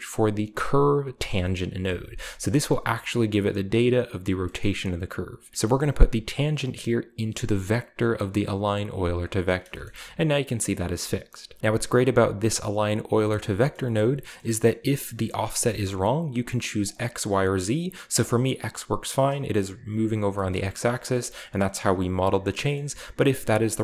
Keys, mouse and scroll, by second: 1.1 Return, 2.8-4.0 drag, 4.4 middle click, 4.8-5.3 drag, 5.9 click, 6.6-8.5 drag, 8.6 click, 9.3-10.4 scroll down 1, 9.4 shift+middle click, 11.6-12.2 scroll up 1, 11.6-12.8 drag, 13.4 shift+middle click, 13.5-14.9 shift+scroll up 2, 14.0 middle click, 14.3-15.6 middle drag, 15.8-16.8 middle drag, 16.8-17.3 drag, 18.1 click, 19.3 right click, 20.3-21.9 shift+middle drag, 20.9-22.0 shift+scroll up 1, 22.5-23.6 shift+middle drag, 22.7-23.8 shift+scroll down 2.